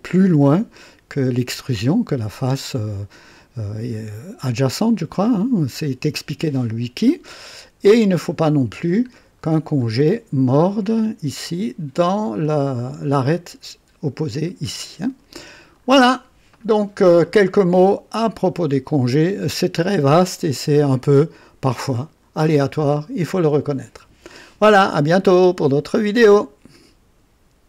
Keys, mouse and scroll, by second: 7.4 click, 9.1 scroll down 2, 12.4-13.3 drag, 15.7 scroll down 1, 16.9 scroll down 1, 17.7-18.5 right drag, 18.7-19.3 right drag, 19.5 click, 20.8-22.6 drag, 22.8 scroll up 2, 23.2 right click, 26.3 right click, 27.6 click.